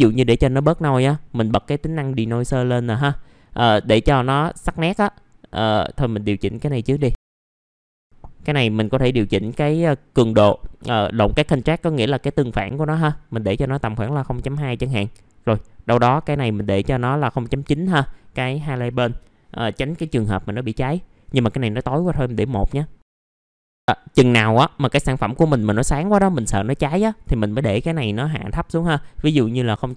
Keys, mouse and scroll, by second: 2.8 click, 11.7 KP_0, 11.9 KP_Decimal, 14.5 KP_2, 18.8 click, 23.3 KP_1, 24.3 click, 26.8 middle click, 27.2 scroll up 1, 29.3 click.